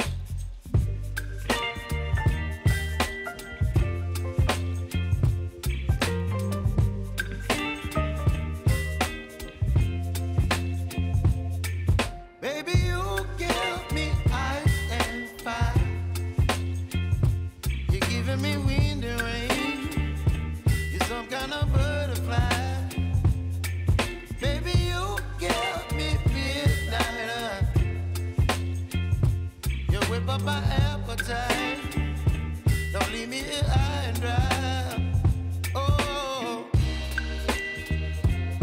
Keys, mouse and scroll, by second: 1.3 space, 1.9-5.8 drag, 6.1 space, 8.8 space, 9.2 click, 10.8 shift+click, 11.4 r, 12.8 scroll down 1, 16.5-18.0 scroll down 1, 20.7-24.2 drag, 25.8 scroll up 1, 26.7 shift+click, 30.1 scroll down 1, 31.1 click, 31.5 space, 32.9 click, 33.8 space, 35.9 click.